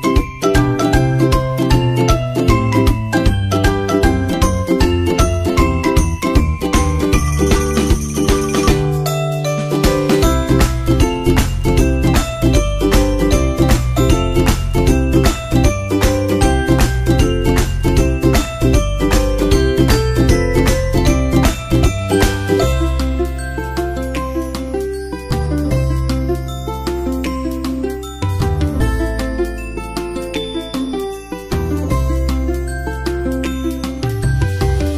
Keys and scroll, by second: 5.0 super+Tab, 25.2 super+Right, 31.7 super+Tab, 31.9 super+Tab, 32.9 super+c, 33.0 super+Tab, 33.2 super+c, 33.2 super+Tab, 34.3 super+v, 34.7 super+Right.